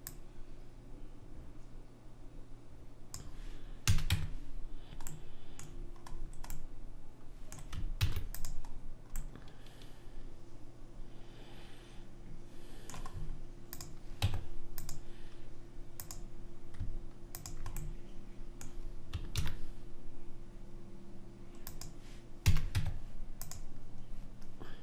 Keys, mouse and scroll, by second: 0.2 click, 3.9 a, 4.2 Tab, 8.1 ctrl+s, 13.6 middle click, 13.9 click, 14.3 Tab, 16.1-19.2 drag, 18.0-19.2 middle drag, 19.3 middle click, 19.5 ctrl+b, 22.6 a, 22.9 Tab.